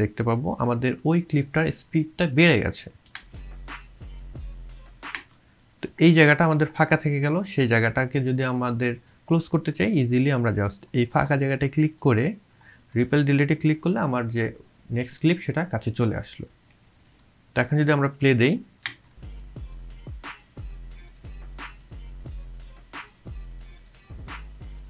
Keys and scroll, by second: 3.2 space, 18.9 space.